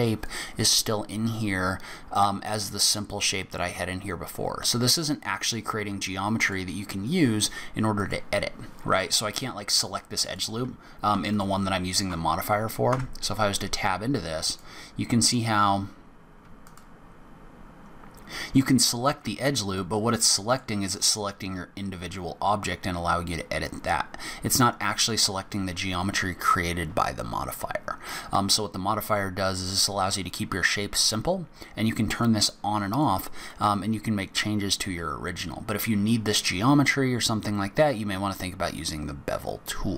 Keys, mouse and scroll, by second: 0.4 click, 2.8 click, 3.7 scroll up 1, 4.2 scroll down 1, 6.6 click, 7.4 scroll up 1, 8.2 click, 8.6 scroll up 3, 9.2-9.8 scroll down 2, 10.4 click, 11.5 alt+click, 13.1 Tab, 14.7 alt+click, 16.8 alt+click, 20.0 middle click, 24.3 scroll up 1, 24.8 scroll down 1, 28.8 scroll down 1, 29.3 scroll down 1, 32.3 click, 33.1 click, 33.7 click.